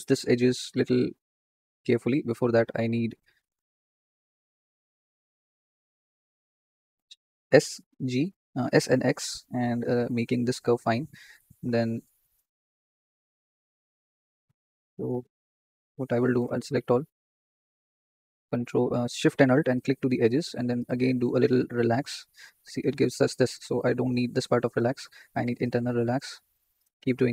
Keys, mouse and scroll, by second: 1.9-2.5 scroll down 4, 2.9 alt+shift+click, 3.1 scroll up 3, 3.6 shift+middle click, 3.9-4.4 scroll down 8, 4.6 shift+click, 5.8-6.3 scroll up 7, 6.8 s, 8.9-10.0 right drag, 11.2 click, 13.1 alt+shift+click, 14.0 click, 14.3-15.9 scroll up 2, 15.9 click, 17.6 a, 19.5 alt+shift+click, 20.7-22.1 right drag, 22.1-22.6 scroll down 8, 22.6 ctrl+z, 23.0 shift+middle click, 23.7 ctrl+click, 25.2 scroll up 2, 25.6-27.3 right drag.